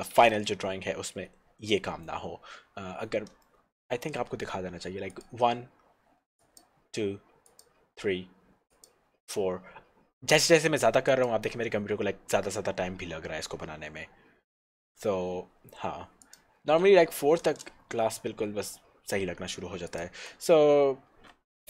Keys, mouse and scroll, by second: 0.3 shift+z, 3.7 middle click, 5.4 click, 16.6 click, 17.5 4, 20.4 click.